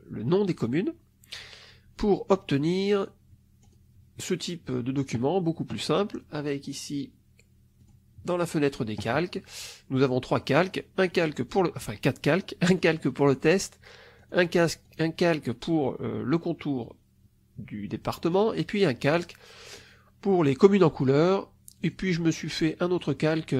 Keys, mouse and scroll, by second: 2.7 click, 3.7 click, 6.5 click, 7.7 click, 10.9 click, 11.4 click, 12.7 click, 13.1 click, 14.1 click, 14.8 click, 18.2 click, 18.9 click, 19.7 click, 20.6 click, 21.7 click, 22.9 click.